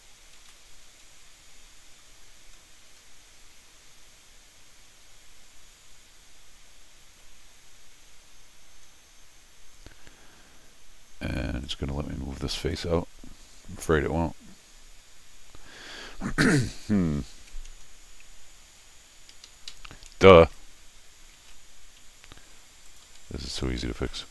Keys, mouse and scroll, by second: 0.4 ctrl+z, 1.0 middle click, 1.9 scroll down 1, 2.9 scroll up 1, 3.6 middle click, 3.7 middle click, 7.1 Tab, 8.9-9.8 scroll up 1, 9.8 scroll up 1, 11.6 click, 12.6 click, 17.9 scroll down 2, 19.3 Escape, 19.4 Escape, 19.7 Escape, 20.4 alt+click, 22.9 click, 23.1 f, 24.1 middle click.